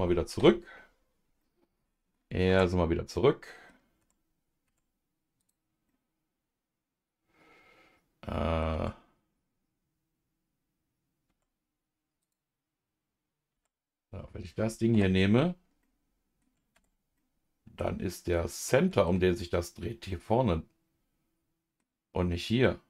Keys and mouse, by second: 0.4 KP_Divide, 1.4 middle click, 2.5 Tab, 2.5 \, 3.1 middle click, 4.0 Tab, 4.6 Tab, 5.4 click, 5.9-8.6 middle drag, 8.7 Tab, 11.3 Tab, 12.2 click, 13.5 Tab, 14.9 KP_Divide, 15.8 middle click, 17.1 Tab, 17.1 middle click, 18.3 middle click, 20.1-21.8 middle drag, 22.6 middle click.